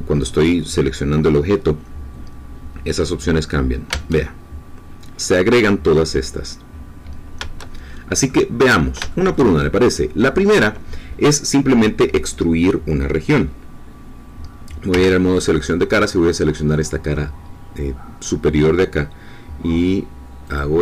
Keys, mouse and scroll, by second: 3.9 Tab, 3.9-5.8 middle drag, 7.9 shift+click, 8.6 scroll up 2, 8.9 middle click, 9.1 shift+click, 9.5 shift+middle click, 14.9 3, 16.0-19.5 drag, 20.4 click.